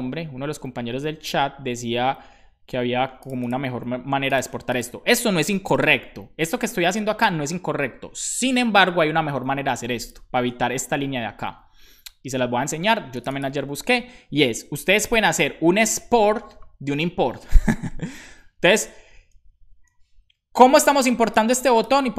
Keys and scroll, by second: 5.7 super+b, 10.8 shift+super+Left, 15.4-17.0 typing, 17.7 Right, 18.1 shift+0, 18.6 BackSpace, 19.8 BackSpace.